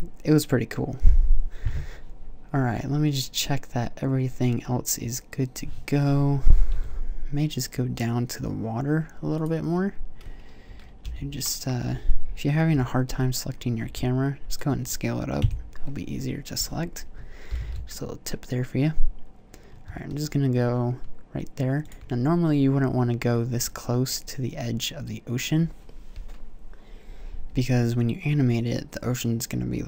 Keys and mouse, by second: 6.2 z, 6.5 z, 10.8 z, 12.5 z, 13.6 s, 15.2 KP_0, 17.3 g.